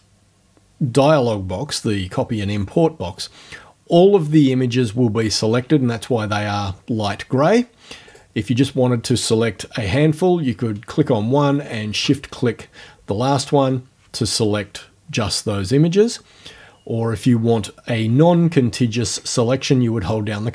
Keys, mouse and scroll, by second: 8.1 click, 11.7 shift+click.